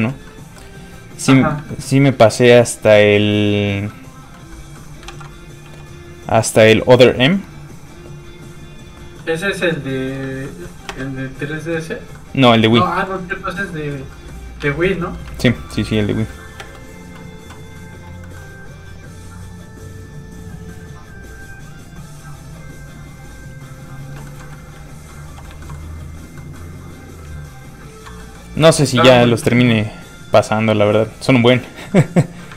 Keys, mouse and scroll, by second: 0.2 middle click, 1.7 shift+middle click, 2.1 shift+f, 2.3 click, 3.9 middle click, 5.0 ctrl+z, 5.6 z, 5.7 f, 9.2 middle click, 9.2 click, 9.6 shift+middle click, 10.3 ctrl+s, 10.6 middle click, 10.9 ctrl+space, 12.1 middle click, 12.9 shift+middle click, 13.4 middle click, 14.0 scroll down 1, 14.1 middle click, 14.7 alt+shift+z, 14.9 middle click, 15.3 alt+shift+z, 15.5 shift+scroll down 1, 16.4 middle click, 16.6 space, 18.2 middle click, 19.1 click, 24.2 shift+middle click, 24.7 ctrl+middle click, 25.2 ctrl+f, 25.4 click, 25.6 shift+middle click, 26.0 scroll up 1, 26.0 f, 26.2 click, 26.3 middle click, 27.3 ctrl+click, 28.2 click, 28.3 middle click, 29.0 alt+m, 30.2 click, 31.3 middle click.